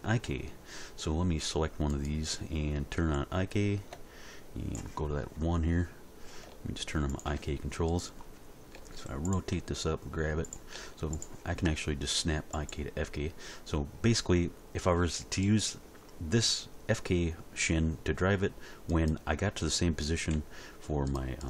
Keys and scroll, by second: 8.8 r, 9.5 g, 10.8 r, 20.3 g.